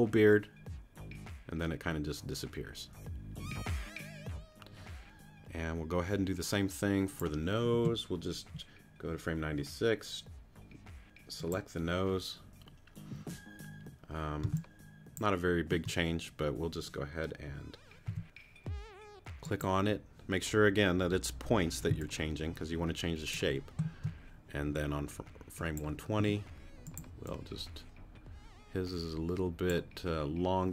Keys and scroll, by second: 14.4 space, 18.1 t, 21.9 space, 26.2 t.